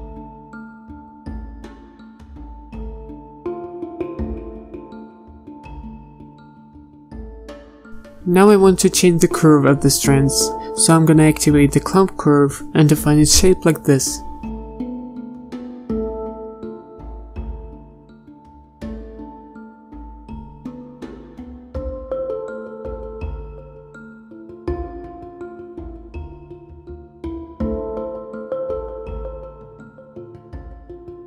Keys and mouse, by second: 0.0-3.8 typing, 4.5-5.5 drag, 5.5 ctrl+z, 7.3 ctrl+z, 12.4-17.3 drag, 18.7-21.0 drag, 22.3 BackSpace, 23.6 click, 24.3-25.9 typing, 26.0 ctrl+KP_Add, 26.1 ctrl+KP_Add, 27.8 click, 27.9 z, 28.5 z, 29.0 z, 30.0 a, 30.8 ctrl+z.